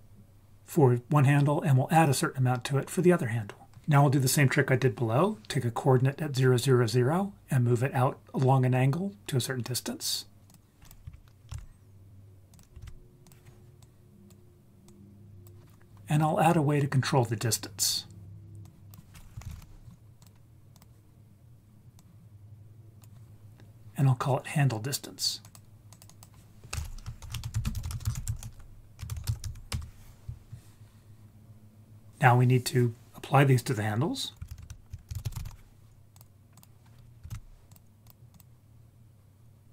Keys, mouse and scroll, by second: 10.4 shift+a, 10.5 click, 10.8 click, 11.5 shift+d, 12.5 click, 12.8 shift+d, 13.2 click, 13.8-14.3 drag, 14.9-15.5 drag, 18.6-20.2 drag, 20.7 click, 22.0-23.0 drag, 25.4 click, 26.1-29.7 drag, 32.1-33.2 scroll down 2, 34.5 shift+a, 37.3 shift+d, 38.0 click, 38.3 click.